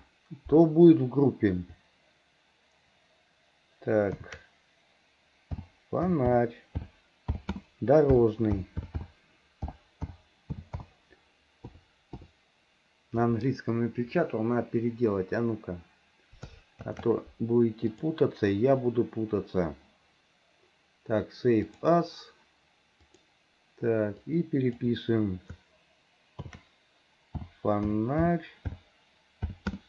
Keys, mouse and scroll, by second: 18.0-22.1 drag.